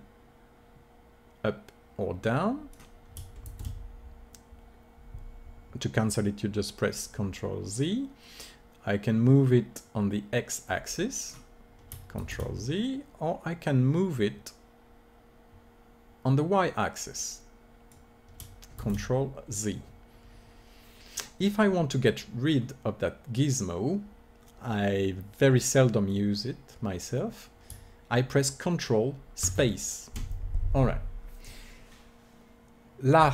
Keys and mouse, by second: 3.4 ctrl+z, 8.2-10.0 drag, 12.1 ctrl+z, 13.6-15.3 drag, 18.7 ctrl+z, 22.5-24.5 middle drag, 24.6-27.3 middle drag, 27.3-29.5 drag, 29.5 ctrl+space.